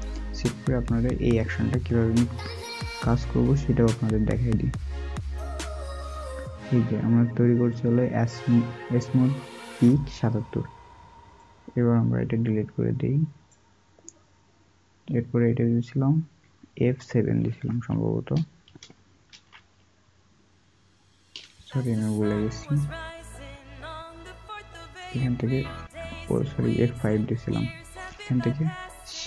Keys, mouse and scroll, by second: 17.3-19.1 alt+scroll.